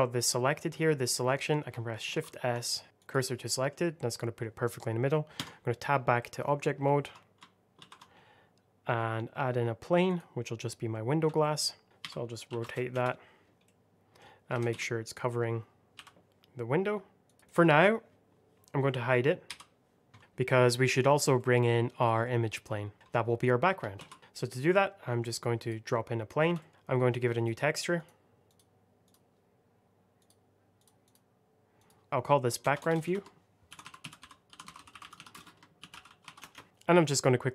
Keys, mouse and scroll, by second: 2.0 shift+s, 2.9 click, 3.4 middle click, 5.3 Tab, 6.1 middle click, 7.7 shift+a, 10.0 click, 11.3 alt+middle click, 11.8 scroll down 1, 11.9 r, 12.4 KP_9, 12.5 KP_0, 12.8 Return, 13.6 middle click, 14.4 s, 14.6 x, 15.8 y, 17.2 click, 20.2 shift+middle click, 20.5 scroll down 1, 21.3 middle click, 22.9 shift+middle click, 23.9 shift+a, 25.5 click, 26.5 alt+middle click, 26.7 click, 30.9 double click, 31.7 click, 32.5 BackSpace, 33.6-36.1 typing, 36.3 Return, 36.6 click.